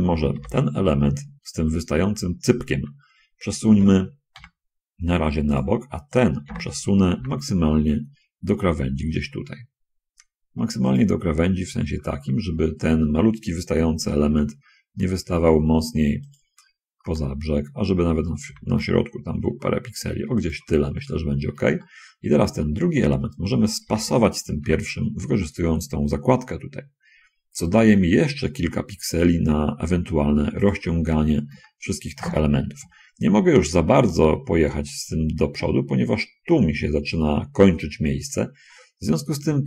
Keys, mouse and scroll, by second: 0.7 l, 4.4 g, 6.8 l, 7.4 g, 11.3 click, 11.7-12.7 middle drag, 14.6 g, 16.4 click, 16.7-17.2 scroll down 1, 17.5-18.7 shift+drag, 18.7 shift+g, 20.7 shift+click, 20.9 shift+middle click, 22.1 shift+middle click, 23.9 l, 25.0 g, 31.0 shift+middle click, 31.3 shift+scroll up 2, 31.9 shift+middle click, 32.4 shift+scroll up 2, 35.9 middle click, 38.2-38.9 scroll down 4.